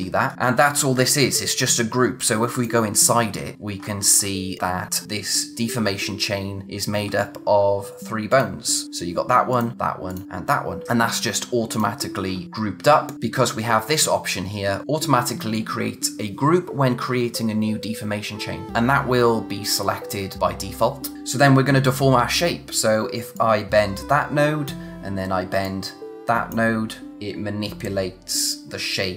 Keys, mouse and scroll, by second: 0.3-0.8 scroll up 1, 0.8 click, 3.2-3.6 scroll down 1, 3.8-6.1 scroll up 1, 6.6-7.1 scroll down 1, 7.1-8.3 scroll up 1, 8.3 click, 10.8-11.2 scroll down 1, 11.7 click, 21.1 z, 23.3 click.